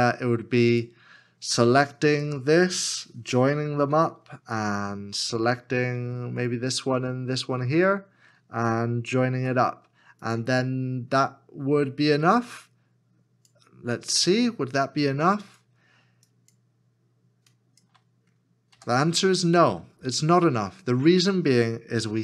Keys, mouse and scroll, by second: 2.0 shift+click, 7.1 f, 7.8 shift+click, 9.4 f, 14.2 f, 15.4 shift+l, 17.5 shift+click.